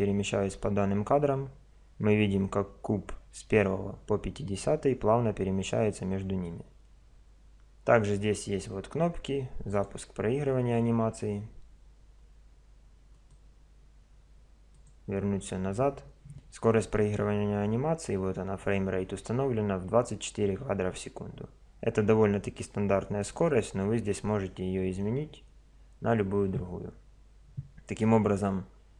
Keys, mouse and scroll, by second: 9.7 click, 13.1-16.7 drag, 20.9 click, 23.2-25.0 drag.